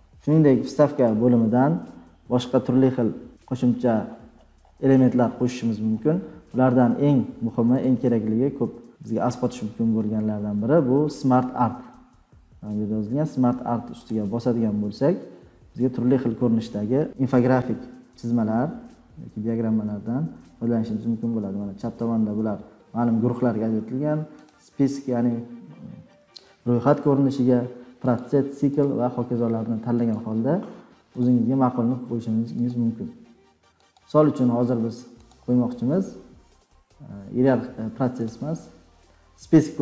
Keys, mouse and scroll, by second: 1.0 click, 4.0-6.0 scroll down 39, 6.2-6.8 scroll, 7.3-7.9 scroll, 7.9 click, 8.2 scroll, 9.1-9.7 scroll, 16.0 click, 16.1-17.2 scroll, 19.4-19.9 scroll, 20.4-23.2 scroll, 23.2 scroll, 23.4 scroll down 12, 24.4 click, 28.2 click, 28.8 click, 30.1 click, 31.2 click, 32.7 click, 33.9 click, 35.3 click, 36.2-36.7 scroll down 4, 36.7 scroll, 38.2 click.